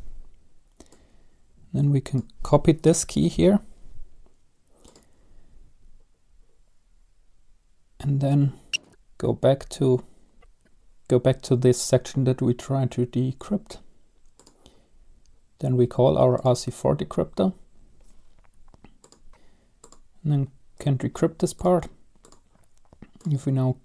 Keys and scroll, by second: 3.2 ctrl+c, 19.3 ctrl+v, 19.3 BackSpace.